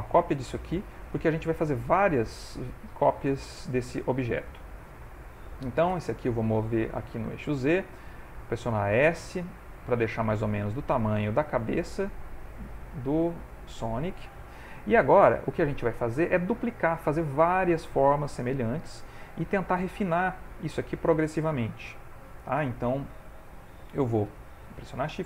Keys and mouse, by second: 4.4 click, 4.5 shift+middle click, 5.8 g, 8.3 s, 13.2 shift+middle click, 23.3 ctrl+middle click.